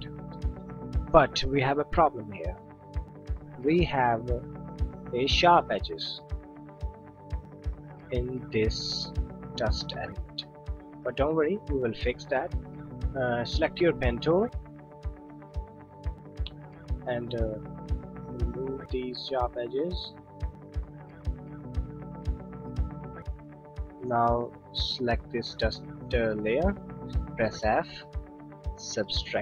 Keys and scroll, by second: 27.6 f.